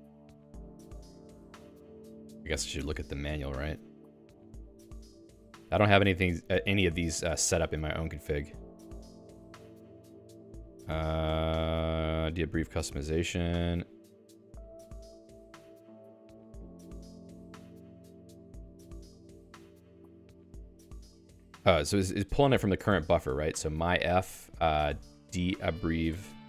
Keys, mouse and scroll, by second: 22.4 Escape, 22.9-26.4 typing, 24.9 alt+x.